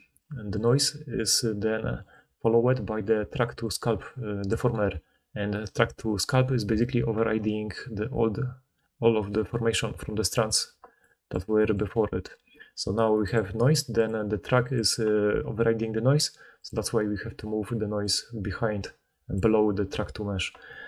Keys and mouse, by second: 0.6-1.9 drag, 2.1-3.5 drag, 3.6-7.1 drag, 10.3 middle click, 13.2 middle click, 13.9 middle click, 14.6 middle click, 14.7-16.5 drag, 16.5 middle click, 16.6-17.9 drag, 17.9-20.8 middle drag.